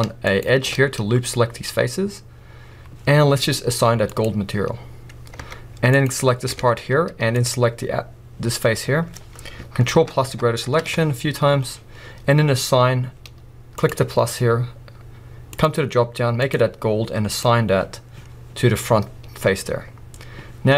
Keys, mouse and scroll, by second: 0.0-0.4 scroll up 1, 0.4 alt+shift+click, 2.0 scroll down 2, 4.8-6.0 drag, 5.4 Tab, 6.5 Tab, 6.8 scroll up 1, 7.5 click, 7.9-8.4 scroll up 1, 9.9 ctrl+KP_Add, 13.9-20.7 drag, 19.3-20.0 scroll down 2, 20.0-20.5 scroll down 1.